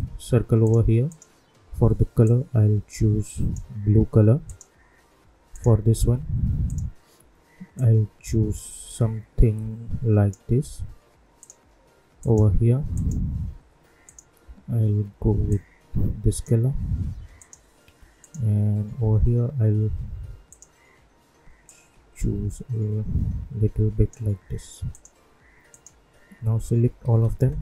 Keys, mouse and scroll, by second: 9.4 -, 11.3-17.3 drag, 20.4-24.9 drag, 27.0 ctrl+a.